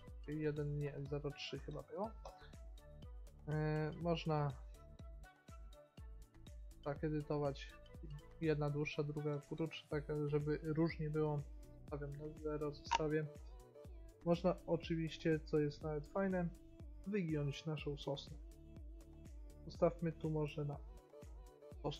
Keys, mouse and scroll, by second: 2.7 middle click, 3.5-5.2 middle drag, 5.2-7.1 drag, 11.3-13.7 drag, 13.7 middle click, 15.8-17.7 middle drag, 17.7-19.7 drag, 21.8 middle click.